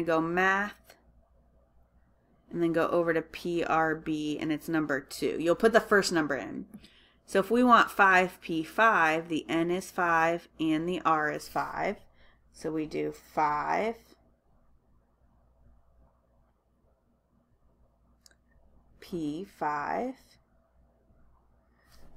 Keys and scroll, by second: 13.7 5, 15.9 Left, 17.7 Down, 18.1-18.8 typing, 20.0 5, 21.3 Return.